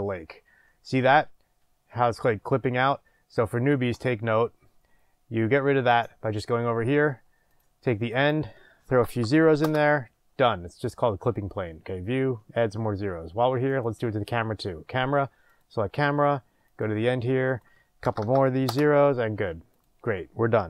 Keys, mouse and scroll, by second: 0.8 scroll up 1, 1.3 scroll down 1, 1.9 scroll up 1, 2.5 scroll down 1, 3.2 scroll up 1, 5.9-13.8 drag, 9.6 KP_0, 9.8 Return, 18.7-19.8 drag, 18.7 KP_0, 18.8 Return.